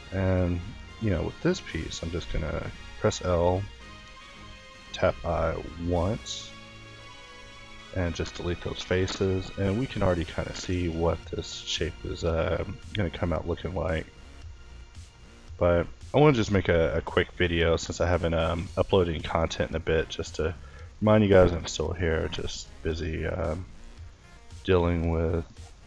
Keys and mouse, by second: 0.7 a, 1.9 l, 3.0 i, 4.1 ctrl+z, 4.9 o, 5.0 i, 6.7 x, 7.7 Tab, 9.7 Tab, 10.5 a, 11.1 a, 12.0 b, 13.7 ctrl+g, 15.5 o, 15.9 g, 17.6 Tab, 18.3 Tab, 19.0 a, 20.0-23.2 middle drag.